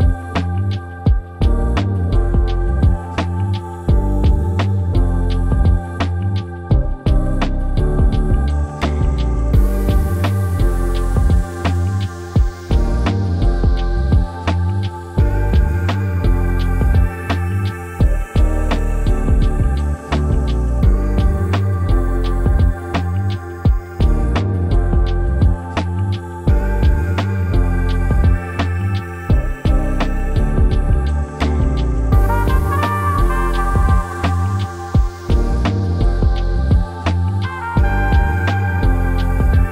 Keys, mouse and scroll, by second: 26.3-35.7 ctrl+drag.